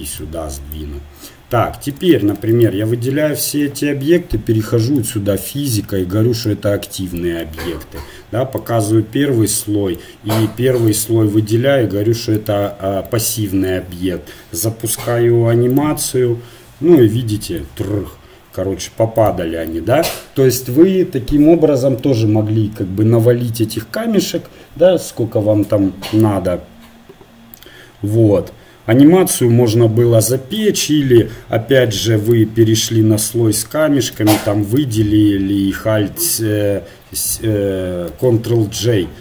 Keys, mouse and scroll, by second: 0.2-10.9 drag, 8.6-11.4 middle drag, 10.9-15.8 right drag, 13.0-17.5 drag, 17.0-18.8 middle drag, 19.2-34.1 drag, 34.1 a, 34.8 a.